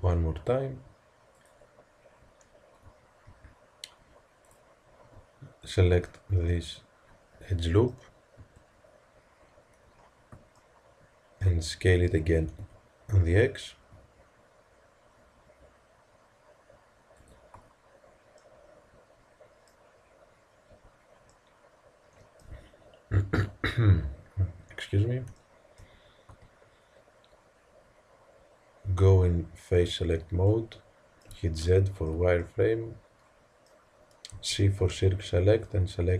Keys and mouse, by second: 4.5-6.0 drag, 6.0 middle click, 6.2 click, 6.3 middle click, 6.4 click, 6.6 click, 6.9 middle click, 8.3 KP_1, 12.2 s, 20.6 Tab, 26.3 Tab, 26.3 click, 29.7 click, 30.4 middle click, 31.1 click, 31.3 z, 34.3 c.